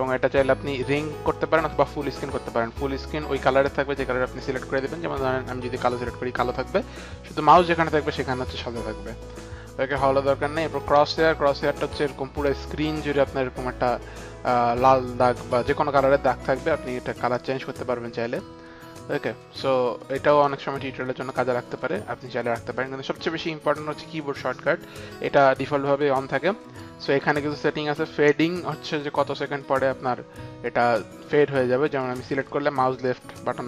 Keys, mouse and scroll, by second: 1.8 click, 5.4 click, 5.9 click, 9.8 click, 11.1 click, 16.8 click, 17.5 click, 18.2 click, 21.8 click, 32.0 click.